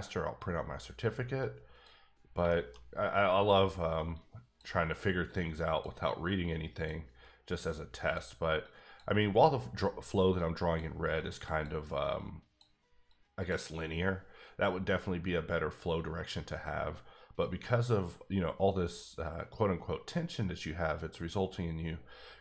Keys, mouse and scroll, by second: 0.4 click, 1.4 click, 2.2 scroll down 2, 2.5 shift+middle click, 3.2-4.1 scroll down 1, 4.1 click, 5.3 click, 6.4 click, 7.6 click, 8.6 click, 9.7 click, 10.3 click, 11.4 click, 12.5 click, 13.1 click, 17.6-18.2 scroll up 1, 18.8 scroll down 1, 19.1-21.2 scroll up 1.